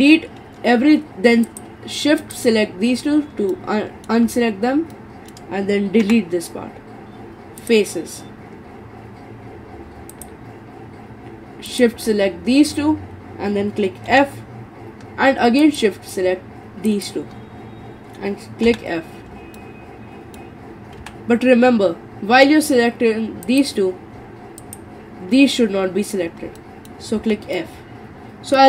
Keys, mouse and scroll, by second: 1.5 shift+click, 2.2 shift+click, 3.5 middle click, 4.3-4.9 scroll up 4, 4.9-6.0 middle drag, 6.0 Delete, 10.1 shift+click, 11.7 shift+click, 14.1 f, 15.6 shift+click, 16.9 shift+click, 18.7 f, 19.6-21.0 middle drag, 21.0 ctrl+z, 23.5 click, 24.6 shift+click, 26.6 middle click, 27.2 f, 27.6-28.6 middle drag.